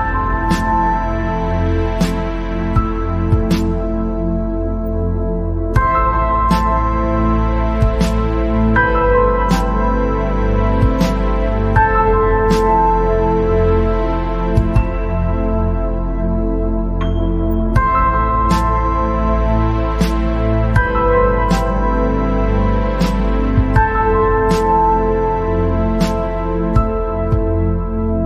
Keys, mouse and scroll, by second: 1.8 click, 2.9 scroll up 4, 3.2 scroll down 2, 3.5 middle click, 4.3 click, 4.5 scroll down 2, 4.7 middle click, 5.2-5.6 scroll up 2, 5.6-6.0 scroll down 2, 6.3 KP_0, 8.8 scroll down 1, 9.1 middle click, 9.7-10.1 scroll up 2, 10.6 click, 13.7 click, 14.3-15.1 scroll down 4, 15.1 middle click, 15.4 click, 15.8-16.4 scroll up 4, 17.2 click, 18.4 click, 19.2 click, 20.7 click, 22.8 click, 23.1 scroll down 1, 24.0-24.3 scroll down 9, 25.2 click, 27.0 scroll up 5.